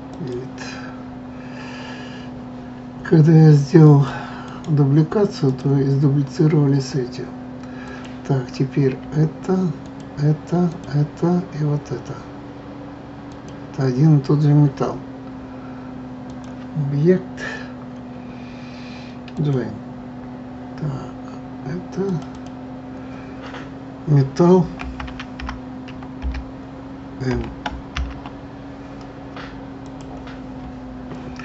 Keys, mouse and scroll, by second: 3.8 click, 4.4-7.8 right drag, 7.8 click, 9.8 shift+click, 10.7 shift+click, 13.3 shift+click, 16.3-19.3 drag, 22.1 click, 22.3-25.3 drag.